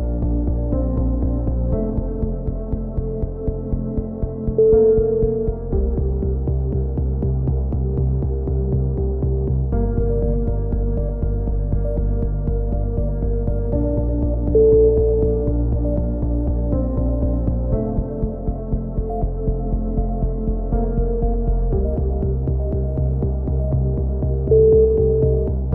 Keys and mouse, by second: 0.0 middle click, 1.9 click, 2.7 middle click, 3.2 click, 4.1 middle click, 4.2 click, 7.5 click, 7.9 right click, 8.5 x, 9.3 z, 9.6 z, 10.0 a, 10.6-11.6 middle drag, 11.3 k, 20.0 a, 22.0 click, 23.0 middle click, 23.4 right click, 24.1 click.